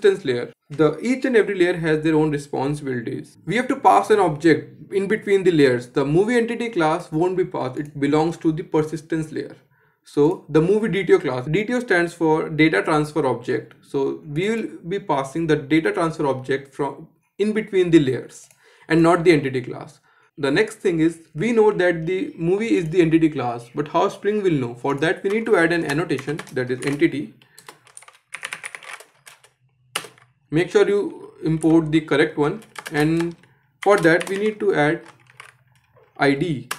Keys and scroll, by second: 29.6 Return, 36.1 shift+Return.